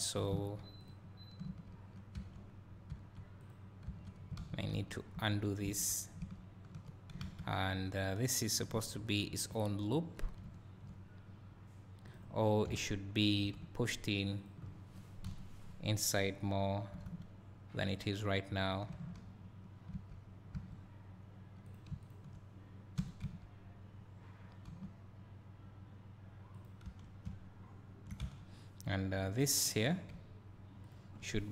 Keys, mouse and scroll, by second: 0.9-1.6 drag, 3.5 click, 4.0 Tab, 4.9 ctrl+z, 5.8 ctrl+z, 7.2 alt+a, 10.6 1, 12.1 click, 13.2 `, 15.3 KP_1, 16.2 scroll up 1, 17.0 g, 21.7 click, 22.1 shift+click, 23.1 g, 26.9 Tab, 28.4-31.5 right drag, 29.2 click.